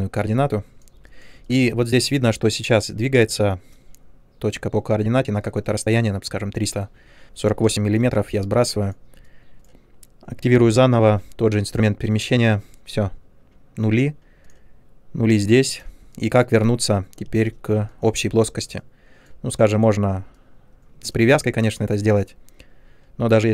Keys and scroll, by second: 7.6 space, 11.0 w, 17.2 space.